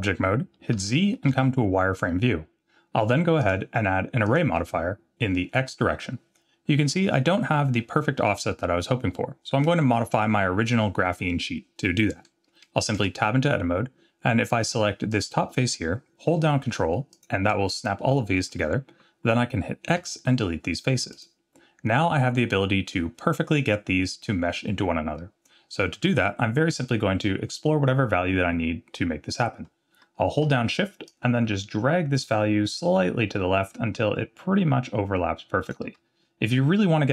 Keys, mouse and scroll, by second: 0.8 z, 3.4 click, 13.0 Tab, 15.1 click, 17.1 ctrl+click, 19.9 x, 31.1-35.8 shift+drag.